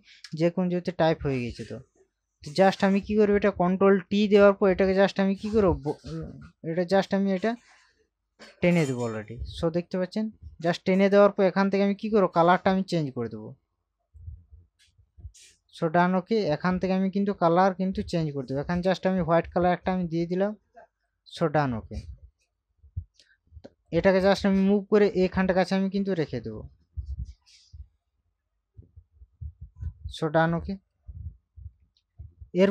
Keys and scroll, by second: 3.9 ctrl+t, 30.7 Up, 31.3 Left.